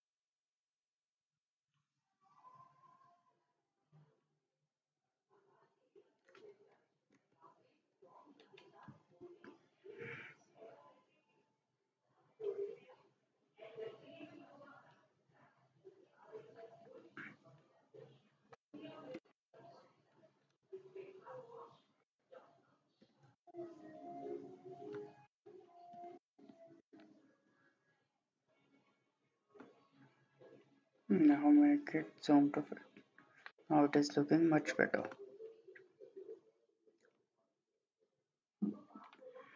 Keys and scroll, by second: 7.1 ctrl+z, 19.3 7, 19.5 Return, 23.1 4, 23.5 Return, 26.0 5, 26.3 Return, 35.1 typing.